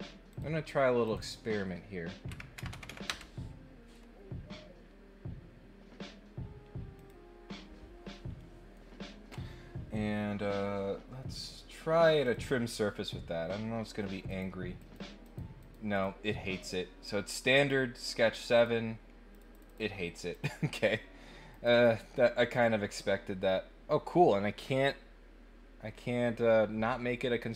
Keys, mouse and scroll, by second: 0.3 click, 1.0 click, 6.9 click, 8.4 middle click, 12.2 click, 14.2 click, 14.7 click, 15.2 click, 15.5 click, 15.9 click, 17.5 click, 18.3 click, 18.5 click, 19.3 click, 19.5 click, 20.3 click, 21.5 click, 22.5 click.